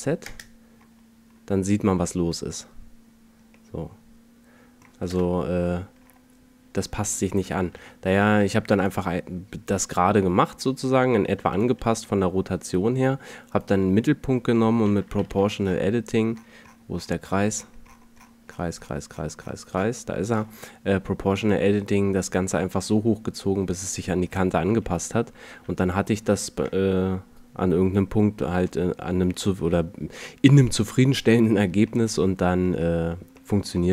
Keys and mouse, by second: 4.0 middle click, 4.2 middle click, 4.8 KP_0, 7.6 ctrl+z, 11.7 r, 14.9 alt+o, 15.1 g, 24.8 Tab, 25.4 a, 33.6-33.9 middle drag.